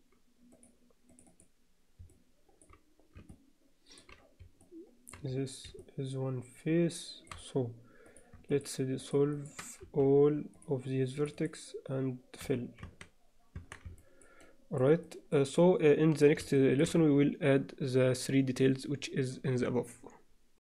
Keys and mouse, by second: 0.5 click, 1.3 click, 2.1 alt+middle click, 3.3 shift+middle click, 4.6 middle click, 5.8-7.0 shift+middle drag, 7.0 alt+shift+click, 8.5 shift+click, 9.1 shift+click, 9.3 shift+click, 9.8 x, 11.4 click, 12.4 f, 12.8 Tab, 13.6 Tab, 14.0 middle click, 14.4 middle click, 15.0 middle click, 15.5 alt+middle click, 16.5 alt+shift+middle click, 16.7 alt+shift+click.